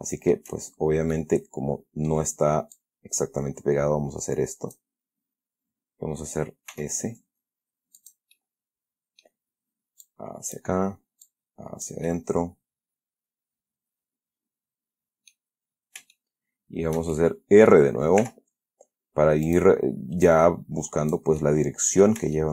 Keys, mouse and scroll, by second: 1.0-1.5 shift+scroll down 5, 1.5-2.6 middle drag, 3.1-5.3 drag, 7.0 s, 8.3 click, 8.7-9.7 middle drag, 10.4 click, 11.6 click, 12.4-15.8 middle drag, 15.9-16.3 scroll up 2, 16.5-18.2 shift+middle drag, 18.5 r, 19.8 click, 20.6-21.6 drag, 21.7 middle click.